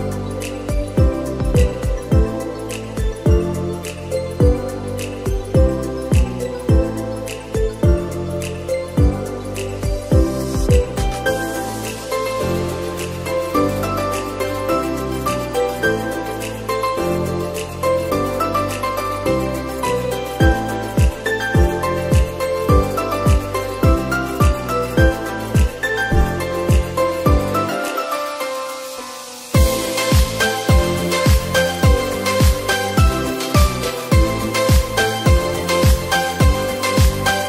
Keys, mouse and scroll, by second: 0.1 g, 1.4-2.8 middle drag, 2.8 KP_0, 4.1 g, 6.9-9.0 drag, 9.0 0, 11.5-13.0 drag, 13.0 0, 15.5 KP_7, 17.2-18.4 shift+middle drag, 18.4 shift+d, 19.6 r, 23.8 KP_0, 25.4 scroll up 3, 26.5 scroll up 4, 29.3 click, 31.5-32.8 drag.